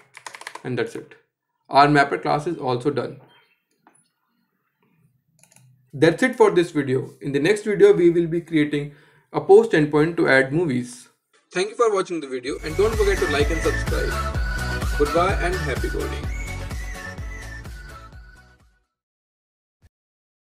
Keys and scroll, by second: 1.4 Escape.